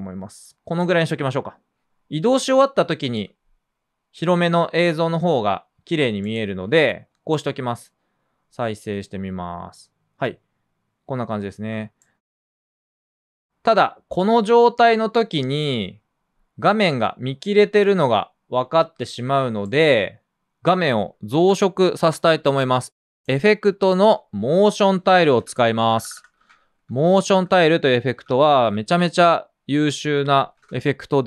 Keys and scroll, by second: 8.9 space, 12.0 space, 24.9-26.7 typing, 26.4 super+space, 27.9-31.2 typing.